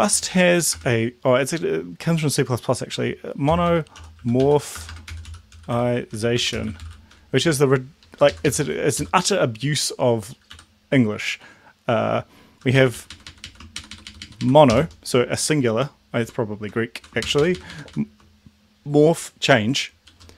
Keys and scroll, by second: 0.0-0.3 typing, 3.3-7.2 typing, 7.5 Left, 7.8 Left, 7.9 Left, 8.0 Left, 8.1 Left, 10.6 End, 12.6 Home, 12.8 Right, 12.9 Right, 13.0 Right, 13.3 Right, 13.4 Right, 14.7 shift+Left, 16.6 Right, 17.2 shift+Right.